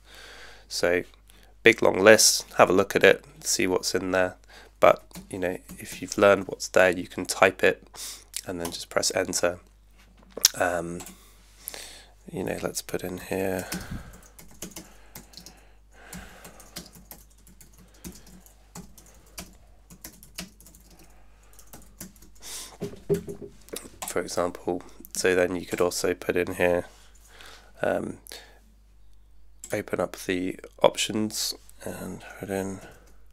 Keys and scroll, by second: 4.8-6.4 typing, 12.7-22.7 typing, 23.1 Tab, 32.6-33.3 typing.